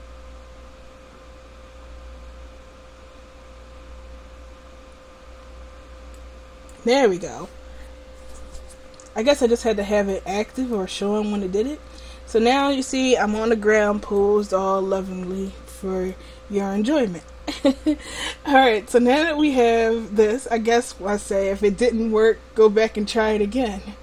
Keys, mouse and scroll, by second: 6.3-14.3 drag, 14.3 middle click.